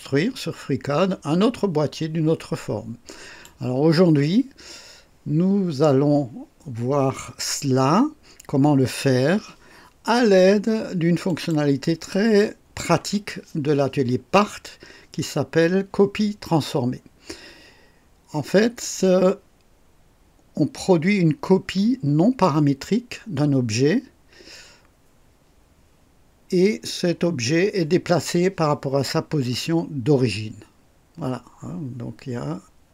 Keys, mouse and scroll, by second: 11.3 click.